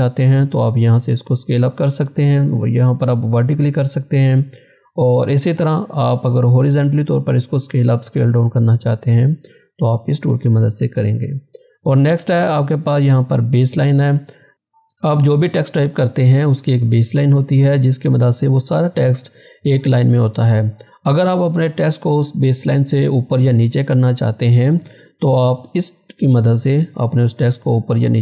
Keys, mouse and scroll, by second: 3.9 click, 3.9 click, 10.2 click, 10.2 click, 25.7 click.